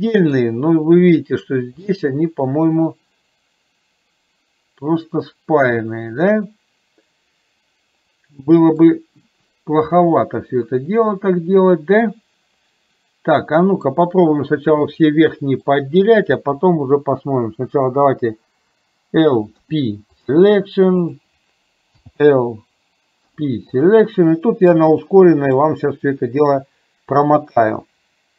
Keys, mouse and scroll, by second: 0.4-1.0 scroll down 1, 1.9-8.9 middle drag, 13.6 middle click, 15.4 middle click, 19.6 p, 22.1 l, 23.4 p, 25.2 middle click.